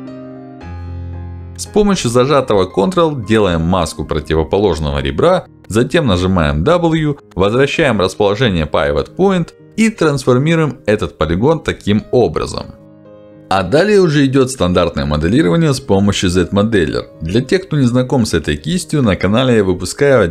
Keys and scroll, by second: 4.6 w, 13.6 q.